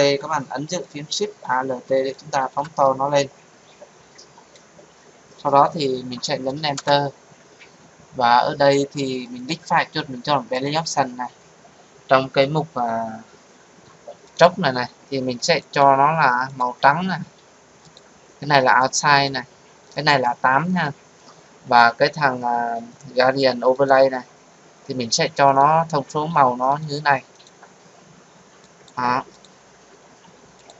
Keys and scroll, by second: 6.7 Return.